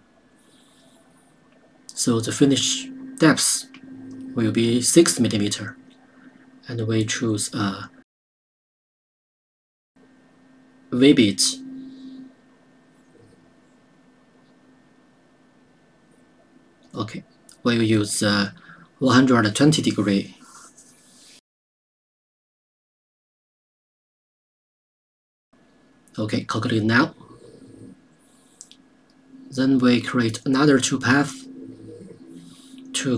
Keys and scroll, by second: 6.4 KP_6.